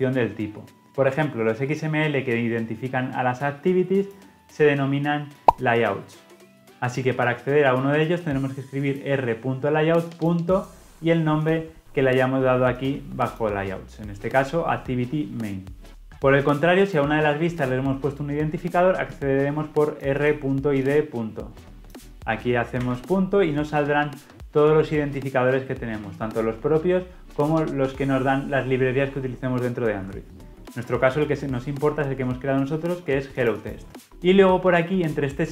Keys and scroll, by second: 14.7 ctrl+alt+Left.